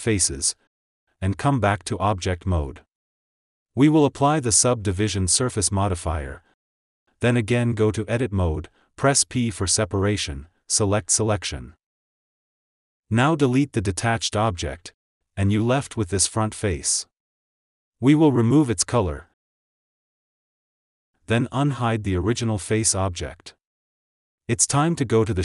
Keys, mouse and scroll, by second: 0.3-1.3 drag, 2.7 KP_1, 3.1 Tab, 5.3-7.7 drag, 7.7 Tab, 9.2 p, 13.4 Tab, 14.0 click, 15.5 click, 16.4 Delete, 17.1 click, 18.9 click, 20.1 click, 21.7 click, 22.6-23.4 scroll up 1, 23.4 click, 23.6 click.